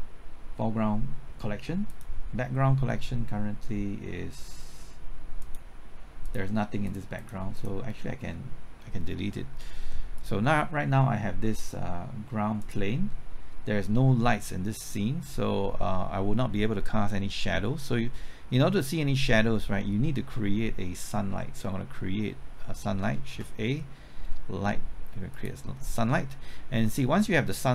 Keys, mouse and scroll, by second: 23.3 shift+a, 25.3 click.